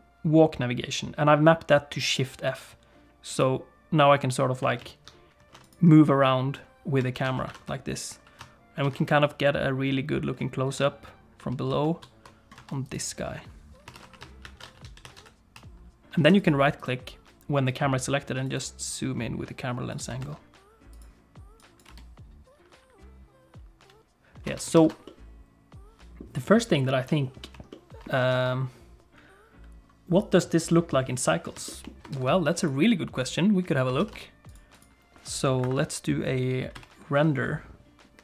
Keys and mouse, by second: 7.1 shift+f, 13.9 shift+f, 16.9-20.0 right drag, 20.2 shift+f, 21.6 click, 24.5 space, 24.8 ctrl+s, 25.1-26.2 middle drag, 27.7 shift+middle click, 28.3 ctrl+s, 31.7 shift+middle click, 32.1 ctrl+s, 32.7-33.8 drag, 34.0 ctrl+s, 34.5 click, 34.8 click, 35.7 F11.